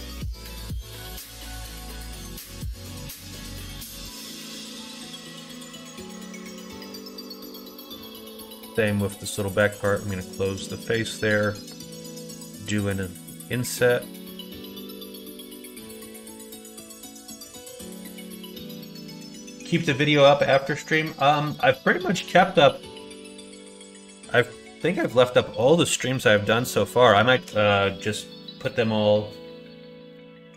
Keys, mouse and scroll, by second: 0.2 scroll up 1, 0.3 middle click, 1.0 alt+z, 1.5 scroll up 1, 1.6-3.4 middle drag, 3.4 scroll down 1, 3.6 scroll up 1, 3.9 e, 5.0 alt+z, 5.4 middle click, 6.5 middle click, 6.9 middle click, 7.5 2, 8.1 alt+click, 9.7 f, 12.1 i, 14.5 click, 25.7 middle click, 26.2 middle click, 26.5 middle click, 27.0 shift+middle click.